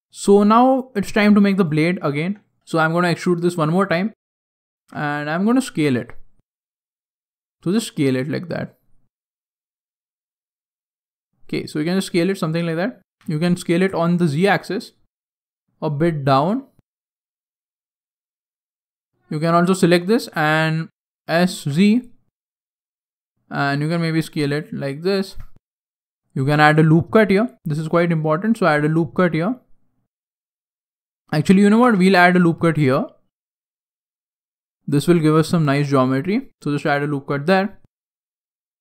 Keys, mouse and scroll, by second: 0.1 shift+middle click, 1.4 alt+right click, 3.7 e, 4.7 s, 6.2-7.2 scroll down 4, 7.2 s, 10.0 s, 19.3 alt+right click, 20.1 s, 25.2-25.9 scroll up 4, 26.3 ctrl+r, 30.9 ctrl+z, 31.8 ctrl+r, 36.6-37.3 scroll down 6, 37.3 middle click, 38.2-38.8 middle click.